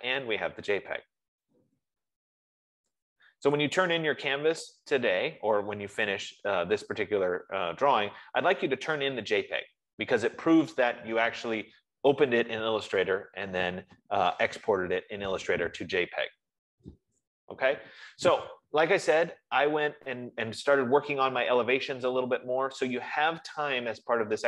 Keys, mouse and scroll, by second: 3.9 click, 7.8-8.9 drag, 13.4 F15.